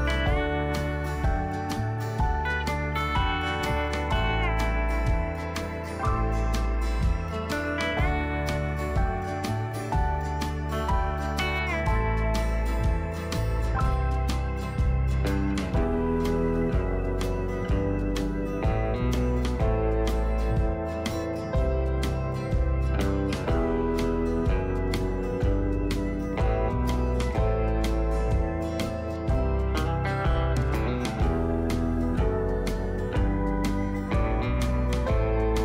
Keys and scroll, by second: 2.3-4.0 typing, 22.5 ctrl+a, 23.0 ctrl+alt+s.